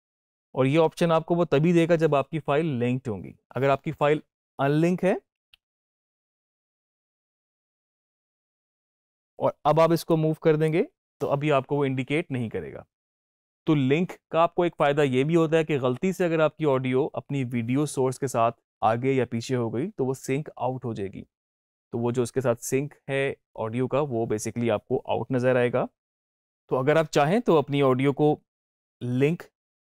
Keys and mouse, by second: 5.2 ctrl+z, 6.1 click, 6.7 right click, 8.2-12.7 drag, 26.1 click.